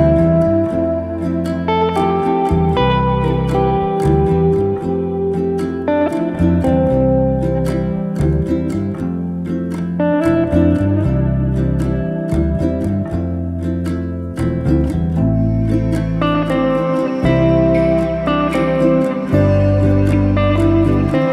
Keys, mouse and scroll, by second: 0.3 click, 0.5 click, 0.8 click, 1.1 click, 1.5 a, 2.4 s, 4.8 scroll up 2, 5.0-5.8 middle drag, 5.8 s, 7.7 Tab, 8.1 click, 8.7 click, 9.1 click, 9.6 s, 10.6 Tab, 11.3 s, 12.6 middle click, 13.0 s, 14.9-16.0 shift+middle drag, 16.0 e, 17.5 middle click, 18.5 i.